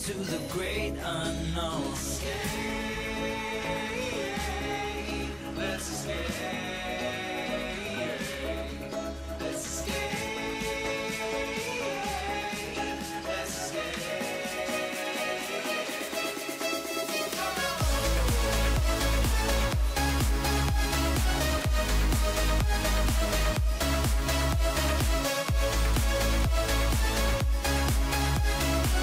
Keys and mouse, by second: 0.2 click, 1.2 click, 2.9 click, 3.3 click, 3.7 click, 4.7 click, 5.2 middle drag, 7.5 g, 8.3 click, 8.6 click, 9.9 click, 11.4 middle click, 11.9 click, 13.5 click, 15.2 click, 15.3 click, 15.9-17.3 middle drag, 18.4 middle click, 19.8 KP_1, 23.2 click, 25.6 click.